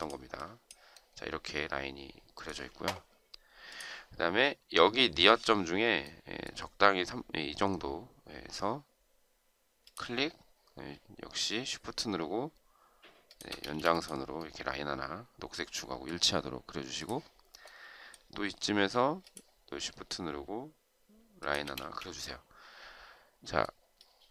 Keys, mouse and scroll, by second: 12.8 shift+click, 13.4 space, 21.1 shift+click, 21.6 space.